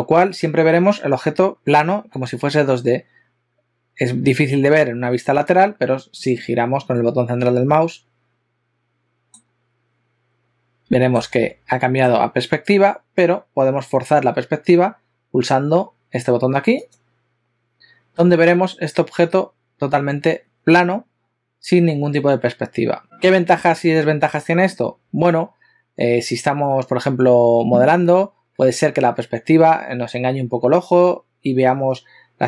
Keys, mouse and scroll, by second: 7.4 middle click, 11.1 shift+middle click, 11.5 ctrl+middle click, 16.8 click.